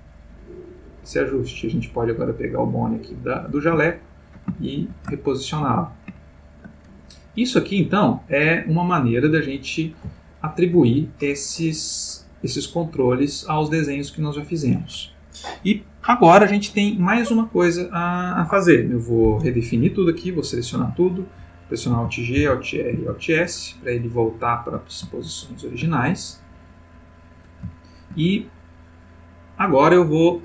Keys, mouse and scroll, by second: 3.2 click, 3.8-5.1 ctrl+middle drag, 5.2-5.8 ctrl+shift+middle drag, 6.1-6.9 ctrl+shift+middle drag, 7.0-9.9 ctrl+shift+middle drag, 10.3-10.9 ctrl+middle drag, 11.4-12.8 middle drag, 12.9-14.7 middle drag, 20.8 a, 21.9 alt+g, 22.4 alt+r, 22.9 alt+s, 24.0-24.9 ctrl+middle drag, 25.2-26.0 ctrl+shift+middle drag, 27.0 click, 27.7-28.3 shift+middle drag.